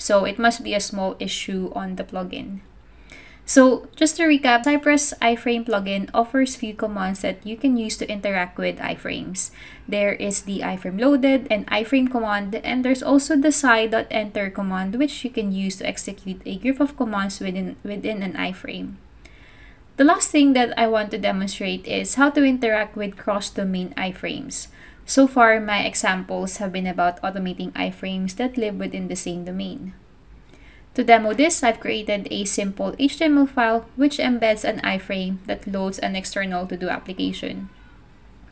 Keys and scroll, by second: 17.6 super+Tab, 19.2 super+Tab.